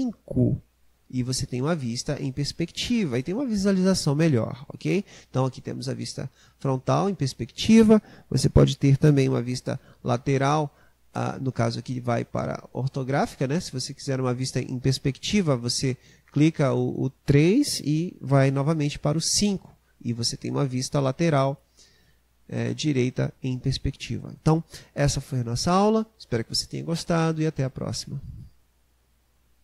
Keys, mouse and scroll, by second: 0.5 KP_5, 9.2 KP_3, 19.3 KP_5.